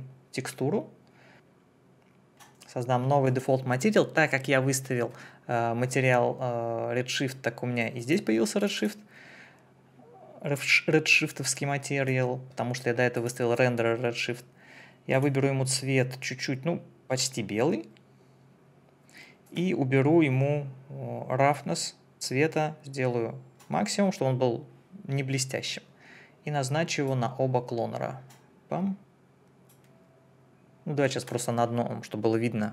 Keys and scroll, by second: 1.3 Escape.